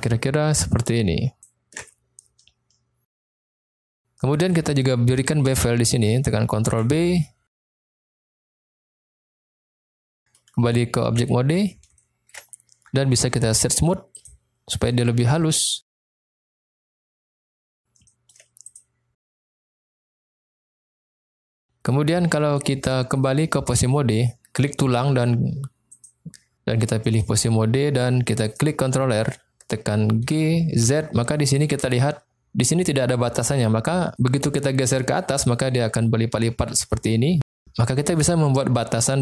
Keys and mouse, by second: 3.6 click, 4.2 middle click, 5.1 middle click, 6.6 ctrl+b, 8.7 click, 9.5 middle click, 11.0 Tab, 11.9-12.2 shift+middle drag, 13.6-14.3 drag, 16.2-16.6 shift+middle drag, 17.0 middle click, 18.0 shift+middle drag, 19.1-19.9 middle drag, 21.2 click, 25.8-27.3 drag, 28.4 click, 30.3 g, 30.9 z.